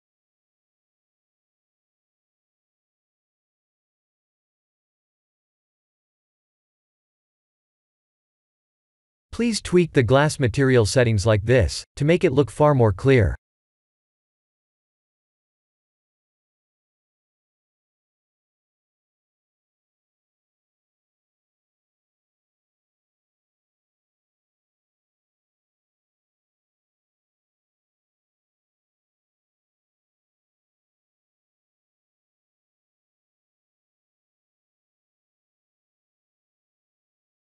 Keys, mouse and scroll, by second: 1.7 click, 6.0 click, 8.2 click, 12.4-21.0 drag, 25.4 click, 28.5 click, 35.2 click.